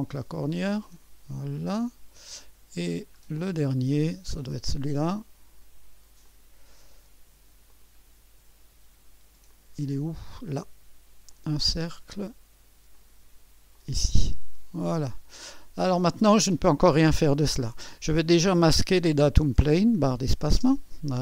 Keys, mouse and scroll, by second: 0.9-2.5 drag, 3.0-4.0 scroll down 1, 3.4-5.5 drag, 6.2-7.3 drag, 7.7-8.7 drag, 9.1-10.2 scroll up 1, 9.5 click, 10.2 middle click, 11.3-12.3 drag, 12.9-14.7 drag, 14.8 click, 16.0-16.5 scroll down 1, 16.3-17.7 drag, 18.3-20.3 drag, 20.6 space.